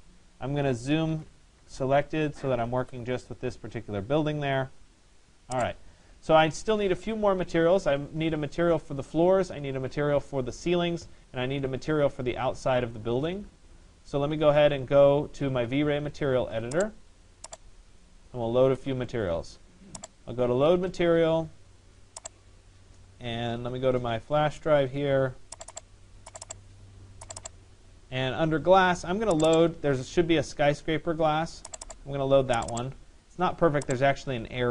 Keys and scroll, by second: 0.9 Return.